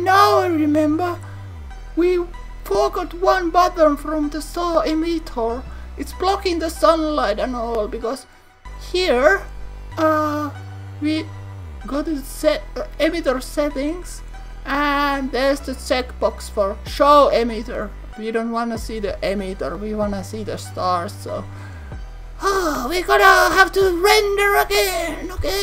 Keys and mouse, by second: 4.0 click, 4.4 click, 8.2 click, 10.8 click, 11.9 click.